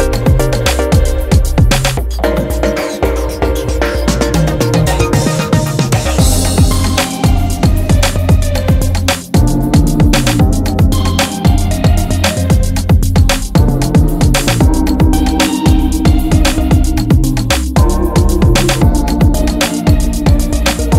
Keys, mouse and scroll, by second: 1.4-2.8 right drag, 3.1 z, 3.2 z, 3.8 x, 5.4 right click, 6.0-7.1 right drag, 6.0 x, 8.4 middle click, 9.1 Tab, 10.2 middle click, 11.2 middle click, 12.0 middle click, 13.9 middle click, 14.1 Tab, 14.3 middle click, 14.6 middle click, 16.5 Tab, 16.8 Tab, 18.7 i, 19.8 e.